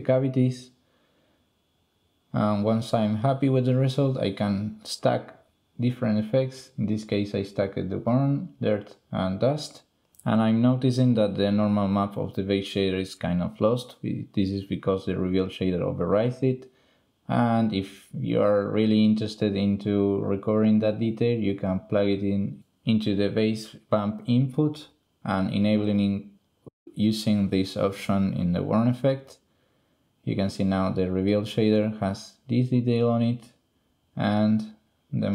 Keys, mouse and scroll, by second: 0.4 click, 4.4 drag, 5.0 click, 5.5 drag, 5.9 shift+click, 6.0 drag, 7.9 click, 8.3 drag, 10.4 click, 12.7 click, 14.0 drag, 15.2 middle click, 15.5 middle click, 16.0-17.5 drag, 17.5 middle click, 18.0-18.6 drag, 18.8 click, 19.2 ctrl+x, 19.8 click, 20.4 middle click, 21.2 middle click, 25.5 middle click.